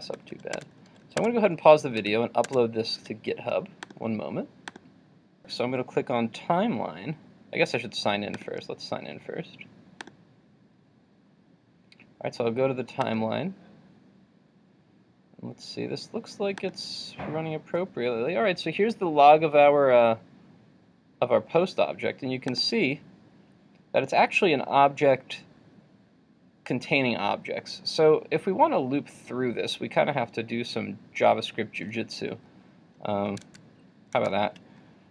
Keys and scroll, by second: 2.0 super+s, 2.6 super+Tab, 33.5 super+Tab.